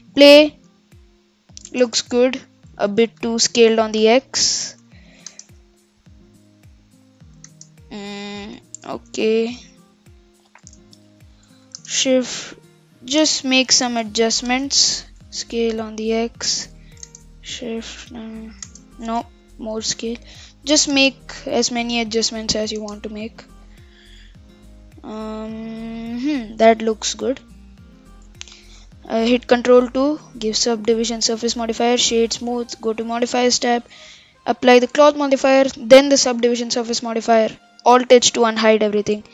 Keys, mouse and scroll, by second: 0.8-1.7 middle drag, 1.7 shift+space, 2.4 KP_7, 3.2 shift+Left, 4.0 s, 5.3 shift+space, 7.5 shift+space, 8.4 ctrl+z, 9.6 Tab, 10.7 Tab, 11.8 shift+space, 13.2 shift+space, 13.6 ctrl+z, 14.5 Tab, 15.4 s, 17.0 shift+space, 18.7 shift+space, 19.4 shift+Left, 19.8 s, 20.9 shift+space, 22.8 shift+space, 23.0 scroll up 4, 23.4-25.1 middle drag, 25.1-25.5 scroll down 1, 25.5-26.5 middle drag, 26.5-27.3 scroll up 4, 27.3-27.7 middle drag, 27.7-28.4 scroll down 4, 28.4 scroll up 4, 29.6 ctrl+2, 30.0-30.6 middle drag, 30.6-31.2 scroll up 4, 31.6-33.0 right drag, 33.0 click, 34.0 click, 34.9 ctrl+a, 36.1 ctrl+a, 36.5-37.1 scroll down 8, 37.1-38.1 middle drag, 38.1 alt+h, 38.7-39.2 scroll down 3, 39.2 click.